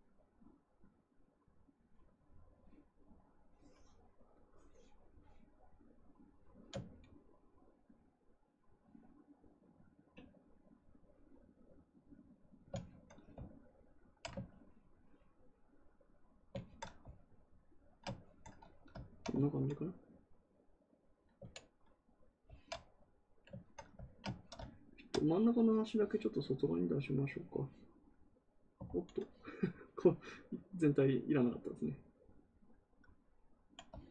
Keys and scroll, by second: 28.8 ctrl+z.